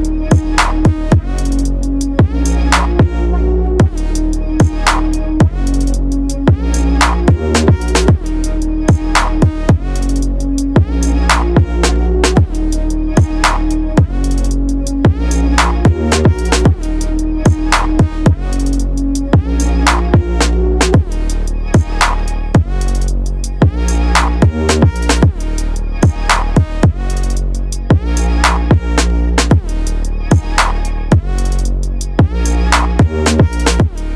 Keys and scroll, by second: 5.0 ctrl+8.